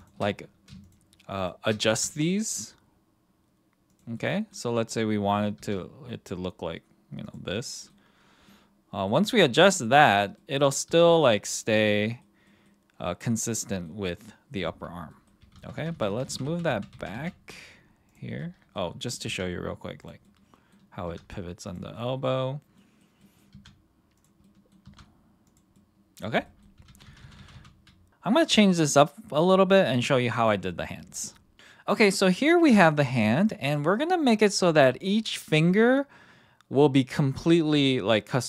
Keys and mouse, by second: 0.0 shift+click, 1.3 shift+click, 1.9 r, 3.9 click, 4.1-4.5 middle drag, 4.7 middle drag, 5.1 middle drag, 5.5 r, 7.2 click, 7.5-7.9 middle drag, 8.5-9.0 middle drag, 9.6 middle drag, 10.3 middle drag, 10.8 r, 12.0 middle drag, 12.4 middle drag, 13.6 middle drag, 15.1 middle drag, 15.5 ctrl+z, 15.7 ctrl+z, 15.9 ctrl+z, 16.2 ctrl+z, 16.4 ctrl+z, 16.7 ctrl+z, 16.9 ctrl+z, 17.2 ctrl+z, 18.4-18.7 middle drag, 19.2 r, 20.0 click, 20.2 middle click, 21.0 r, 21.7 click, 21.9-22.4 middle drag, 22.7 middle drag, 23.2 middle click, 23.5 r, 24.4 middle click, 24.8 r, 25.5 click, 25.7-26.2 middle drag, 26.4 middle drag, 26.9 ctrl+z, 27.1 ctrl+z, 27.2 ctrl+z, 27.4 ctrl+z, 27.6 ctrl+z.